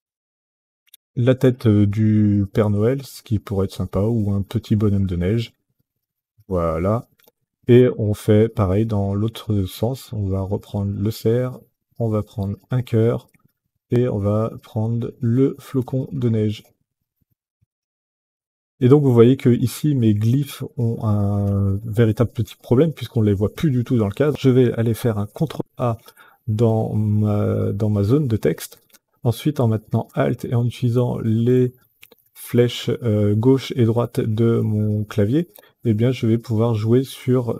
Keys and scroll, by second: 25.2 ctrl+a, 30.7 alt+Left, 34.2 alt+Left, 36.8 alt+Right.